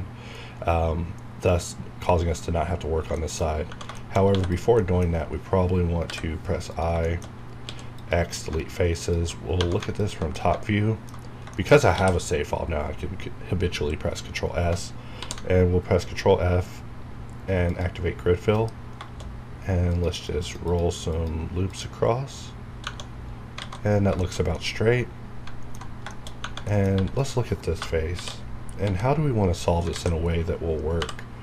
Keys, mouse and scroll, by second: 2.8 scroll up 1, 3.1 shift+middle click, 3.4 shift+scroll up 1, 3.7 Right, 3.9 shift+middle click, 4.3 3, 4.4 click, 4.7 middle click, 5.2 scroll up 1, 6.0 i, 6.6 click, 7.0 shift+middle click, 7.2 shift+scroll up 2, 7.6 x, 7.9 click, 8.4 scroll down 1, 9.0 alt+click, 9.5 1, 9.9 alt+click, 10.3 middle click, 11.2 scroll down 1, 11.5 shift+middle click, 11.9 ctrl+s, 12.9 scroll up 1, 15.2 ctrl+f, 17.6 click, 18.5 F9, 19.8 click, 20.1 click, 20.6 click, 22.8 Tab, 23.1-23.5 scroll down 1, 23.6 alt+a, 23.9 scroll down 1, 24.2-26.1 shift+middle drag, 26.2 shift+scroll up 1, 26.6 middle click, 26.9 3, 27.2 click, 28.1 shift+h, 28.7 KP_7, 29.8 alt+a, 30.2 scroll up 1.